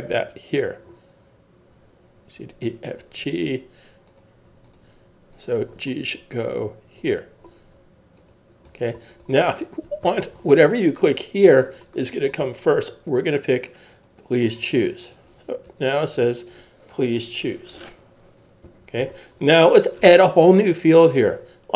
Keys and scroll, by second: 10.0 super+s, 18.6 super+s.